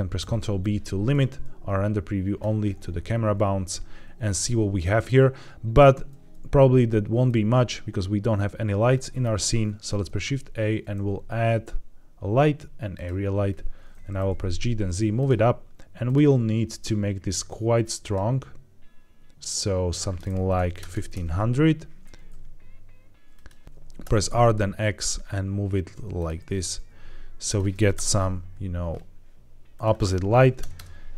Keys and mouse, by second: 0.1 ctrl+b, 6.0 z, 8.7-9.1 middle drag, 9.8 shift+a, 14.0 g, 14.2 z, 15.1 click, 15.9 click, 17.7 click, 19.8-21.1 drag, 20.8 KP_0, 22.1 g, 22.2 z, 23.2 click, 23.6 Escape, 23.6-24.2 typing, 26.1 click, 26.3 g, 26.5 z, 26.7 z, 27.4 click, 27.8 KP_0, 29.6-31.1 drag, 30.6 KP_0.